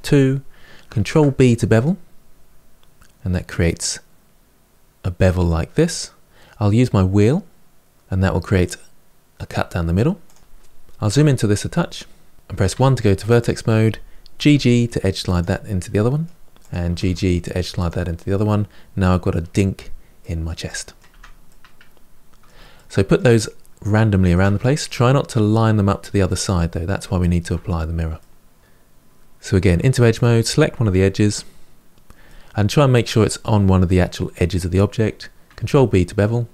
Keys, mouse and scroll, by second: 0.8 ctrl+b, 10.8 KP_Decimal, 11.5-12.3 scroll down 2, 12.5 1, 13.2 click, 14.2 g, 15.6 middle click, 16.4 click, 16.7 g, 18.1-19.3 middle drag, 19.3-20.4 scroll down 9, 20.4 middle click, 20.9 Tab, 21.2-27.4 middle drag, 27.4-28.0 scroll up 1, 28.0-29.5 middle drag, 29.5 2, 29.9 click, 32.1-35.1 middle drag, 35.4 ctrl+b.